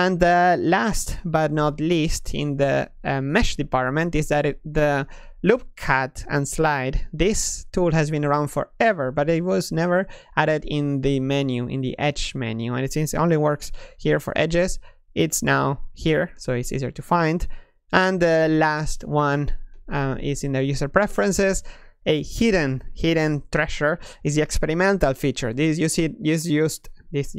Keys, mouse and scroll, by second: 1.4-5.0 middle drag, 5.0 ctrl+e, 18.0 Tab, 19.1 F4.